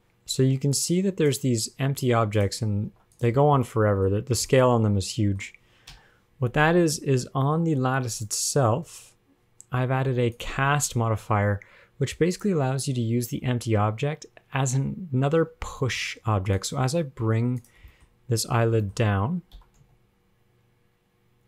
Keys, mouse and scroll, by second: 0.0-1.0 scroll up 2, 1.0 click, 2.2 click, 3.4 click, 3.4 ctrl+Tab, 3.4 click, 4.0 middle click, 4.0 scroll down 5, 4.4 scroll up 1, 4.4 scroll down 2, 4.7 middle click, 5.6-6.2 scroll down 1, 6.2 KP_1, 6.6-7.2 scroll up 20, 7.6 shift+middle click, 8.3 click, 10.2 click, 10.6 click, 12.6 click, 16.0 shift+middle click, 16.3 scroll up 1, 16.8 click, 17.6 ctrl+Tab, 17.8 click, 18.4 shift+middle click, 18.8 scroll down 2, 19.0 shift+middle click, 19.2 scroll up 2, 19.8 g.